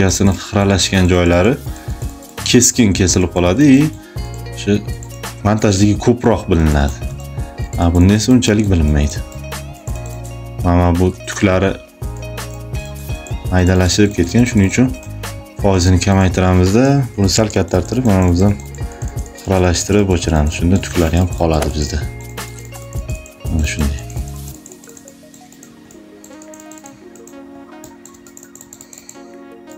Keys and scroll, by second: 3.3 space, 6.6 space, 8.0 space, 20.8 space, 23.1 space, 27.3 space.